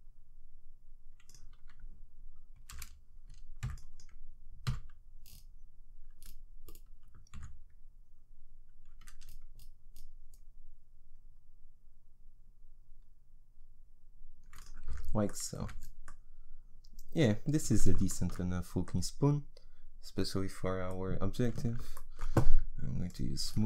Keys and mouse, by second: 2.7 a, 3.6 b, 4.7 g, 14.9 Tab, 15.6 z, 23.1 click.